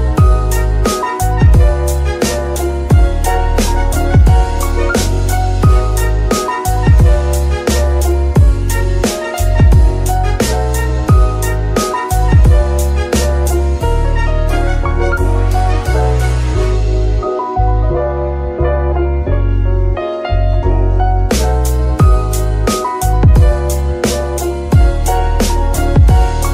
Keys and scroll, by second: 1.9 F2, 2.7 BackSpace, 2.9 BackSpace, 3.0 BackSpace, 3.1 BackSpace, 4.3 Left, 5.7-9.1 typing, 15.0 g, 16.2 Escape, 17.3 KP_Decimal, 21.3 KP_3, 23.3 shift+d, 23.6 shift+y.